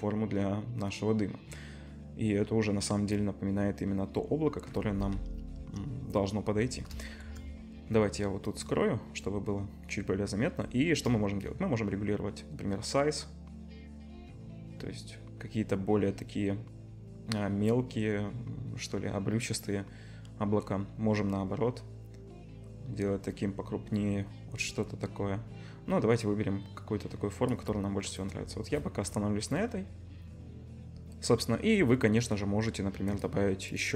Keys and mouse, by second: 5.6 KP_0, 8.6-11.5 middle drag, 11.5-33.2 shift+drag, 33.2 middle click, 33.8 click.